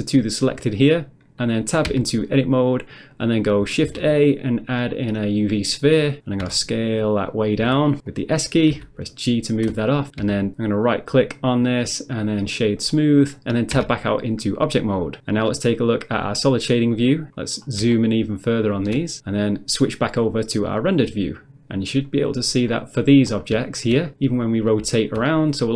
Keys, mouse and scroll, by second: 1.9 Tab, 3.9 shift+a, 5.4 click, 6.4 s, 7.3 click, 7.7 s, 8.1 click, 8.7 g, 9.6 click, 10.5 Tab, 10.8 right click, 12.8 click, 13.8 Tab, 16.2 click, 17.4 scroll up 1, 17.9 shift+middle click, 19.1 scroll down 1, 20.9 click, 22.1 click, 22.7 middle click, 23.3 middle click, 23.4 scroll down 1, 23.6 shift+middle click, 24.0 middle click, 24.7 middle click, 25.0 shift+middle click, 25.3 middle click.